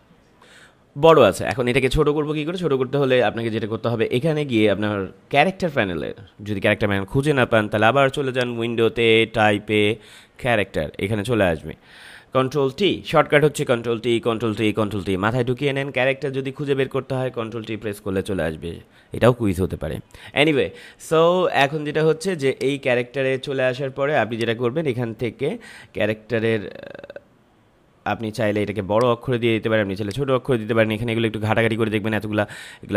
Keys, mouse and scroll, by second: 0.4 ctrl+m, 1.3 click, 8.3 click, 21.4 click, 28.9 click.